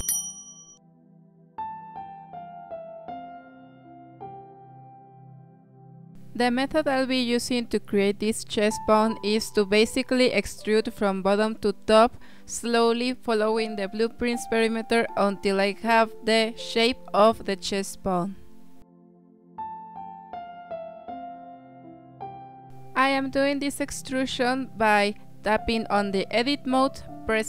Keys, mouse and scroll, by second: 1.4 scroll down 3, 1.7-2.3 shift+middle drag, 2.3 Tab, 2.7 1, 3.2 click, 4.0 g, 7.6 scroll up 2, 8.1-9.4 shift+middle drag, 9.4-10.2 scroll up 2, 10.2-10.8 scroll down 1, 13.2 e, 16.3 s, 18.5 e, 20.4 e, 21.6 s, 22.9 e, 24.4 s.